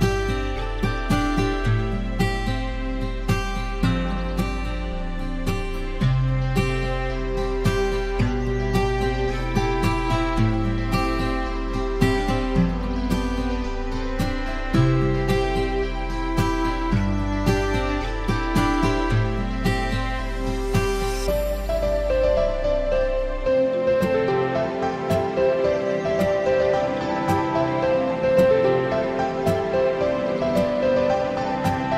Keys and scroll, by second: 17.9 ctrl+-, 19.2 ctrl+q, 19.8 ctrl+", 21.1 ctrl+-, 21.3 ctrl+", 23.6 ctrl+j, 27.7 ctrl+0.